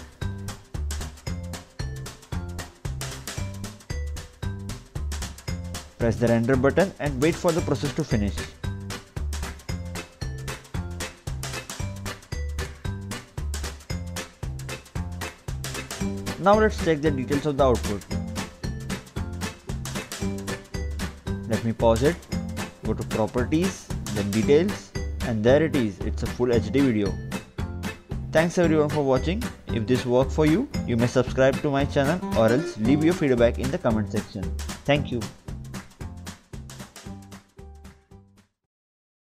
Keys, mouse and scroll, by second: 5.3 click, 5.9 click, 7.9 click, 13.3 click, 14.1 click, 15.8 click, 18.9 click, 20.1 double click, 21.7 click, 22.5 right click, 23.0 click, 26.2 click, 27.0 right click, 27.3 click, 28.4 click, 29.0 right click, 30.5 click, 31.0 right click, 31.8 click.